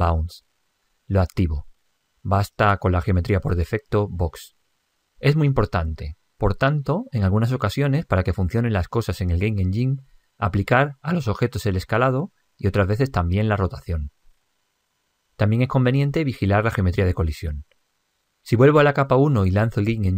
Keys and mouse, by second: 1.8 click, 18.9 click, 20.1 p.